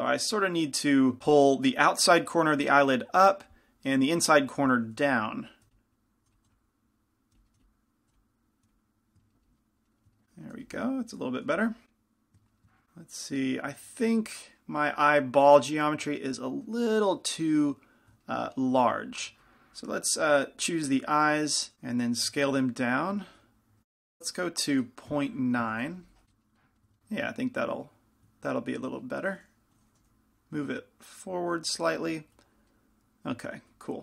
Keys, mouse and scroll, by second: 5.2-8.7 typing, 5.8-10.1 middle drag, 6.0-7.6 drag, 7.9-9.7 drag, 10.8 f, 11.7 f, 12.1-13.1 drag, 20.4-21.7 drag, 21.7 s, 22.5 z, 23.8 s, 23.9 s, 26.3 z, 26.5-30.0 middle drag, 30.0 g.